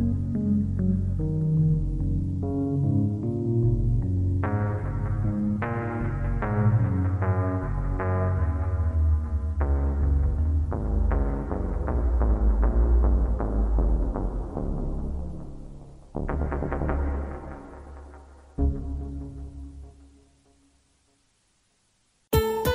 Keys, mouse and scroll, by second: 3.2 click, 4.0 g, 5.7 click, 6.1 g, 7.4 click, 9.2 click, 13.4 click, 14.4 click, 15.0 click, 15.6 click, 19.1 right click, 20.5 click, 21.1 click.